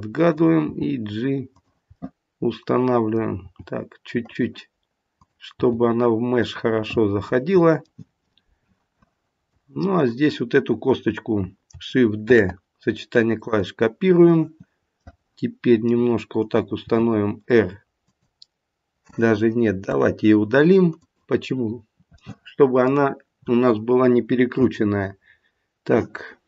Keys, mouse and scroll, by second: 0.2 click, 0.7 g, 1.9 middle click, 3.3 g, 5.6 click, 5.6 g, 6.8 middle click, 8.1 middle click, 9.9 click, 12.3 shift+d, 15.0 middle click, 16.8 r, 19.8 Delete, 22.1 middle click.